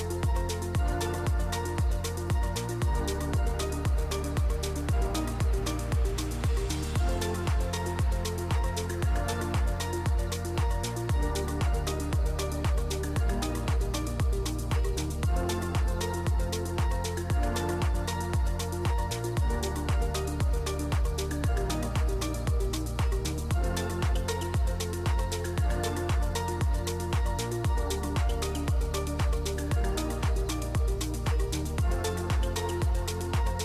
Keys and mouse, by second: 0.4-2.2 drag, 1.3 0, 2.5 drag, 5.2 ctrl+s, 11.8 q, 12.8 click, 14.5 q, 15.5 g, 17.4 click, 18.0 g, 19.5 ctrl+s, 21.1-22.5 shift+drag, 23.1 ctrl+s, 29.3 ctrl+s, 29.7 click, 30.7 click.